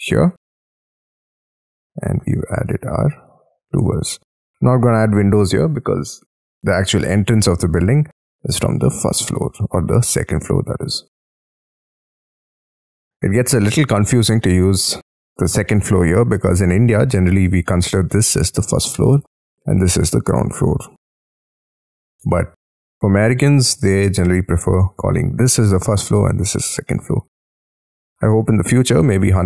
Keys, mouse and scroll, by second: 0.5 middle click, 2.2 shift+middle click, 2.6 space, 2.9 Escape, 3.2 Escape, 3.7 Escape, 3.8 scroll down 4, 4.0 Escape, 7.2 middle click, 8.8 middle click, 10.6 middle click, 12.8 scroll down 3, 13.4 Escape, 13.6 Escape, 13.9 middle click, 20.7 middle click, 28.8 middle click.